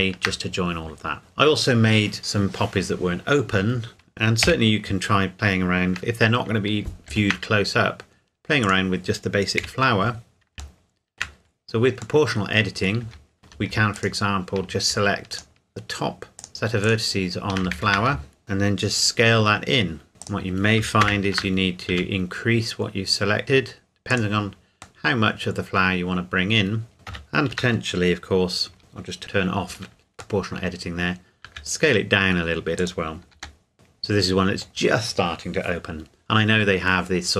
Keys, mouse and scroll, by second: 0.9-2.0 scroll down 1, 4.4 KP_1, 5.2 scroll down 1, 7.1 shift+d, 8.6 click, 9.6 KP_Decimal, 10.8 shift+middle click, 11.4-12.2 scroll up 2, 12.2 middle click, 13.0 Tab, 13.4 alt+click, 14.0 alt+click, 17.8 ctrl+z, 18.4 s, 19.4 scroll down 1, 20.2 click, 21.0 ctrl+KP_Add, 21.9 s, 22.8-23.1 scroll up 1, 24.1 click, 25.0 middle click, 26.9 ctrl+KP_Add, 30.4 middle click, 31.4 s, 32.8 click, 33.3 g, 33.7 middle click.